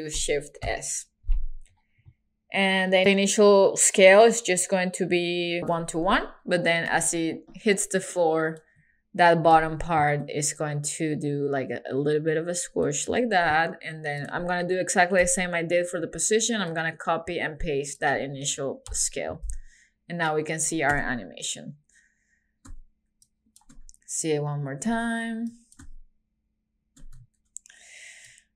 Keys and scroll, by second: 0.7 shift+s, 6.9 super+c, 9.5 super+v, 15.2 super+c, 18.9 super+v.